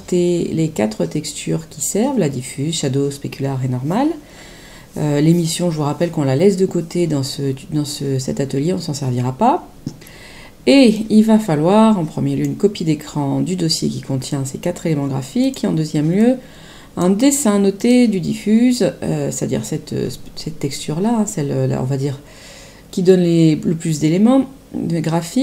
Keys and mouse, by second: 10.9 click, 15.4 click, 17.7 click.